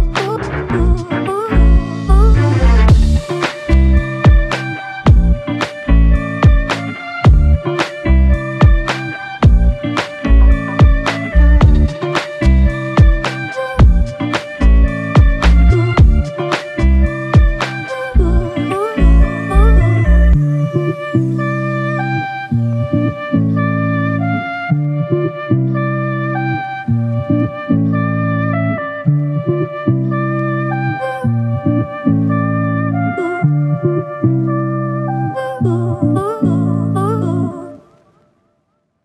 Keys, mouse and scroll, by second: 3.2 shift+click, 9.8 alt+click, 11.1 alt+click, 14.1 alt+click, 16.9 shift+click, 33.8 typing.